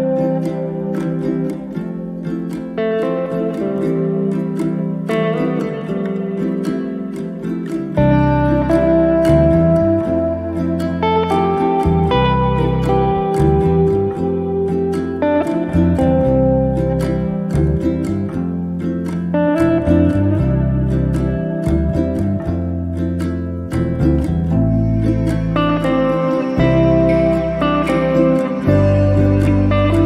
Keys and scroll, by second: 19.1 m, 29.8 q.